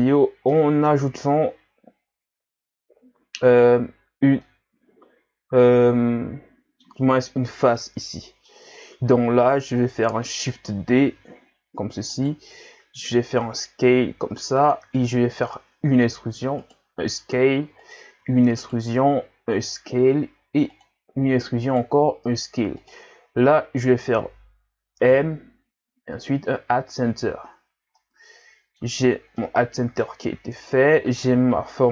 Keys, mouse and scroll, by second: 0.1-0.5 scroll up 2, 0.5-3.6 middle drag, 3.6 alt+right click, 4.5-7.5 middle drag, 7.8-10.9 middle drag, 11.2 shift+d, 13.0 s, 25.1 m, 27.2 Tab, 27.6 scroll down 2, 27.9-29.0 middle drag, 29.0-29.4 scroll up 3, 29.4-30.6 middle drag, 30.6 Tab.